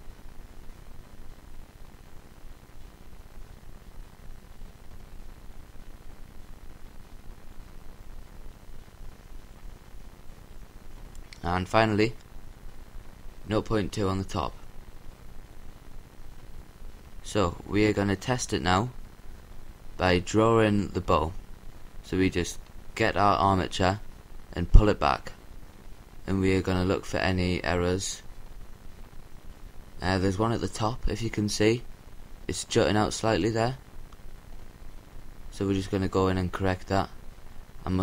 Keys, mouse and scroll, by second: 0.6-3.0 drag, 6.9-8.4 drag, 9.3-10.8 drag, 13.2-14.7 drag, 16.8-18.9 scroll down 1, 18.9-20.7 middle drag, 20.7-22.4 scroll up 1, 22.4-22.8 scroll up 1, 24.0-25.5 scroll down 1, 25.5 scroll down 1, 25.5 g, 31.5-33.0 right drag, 33.0-33.9 scroll up 1, 33.9-35.4 scroll up 1, 35.4-36.9 middle drag, 37.8-38.0 scroll up 1.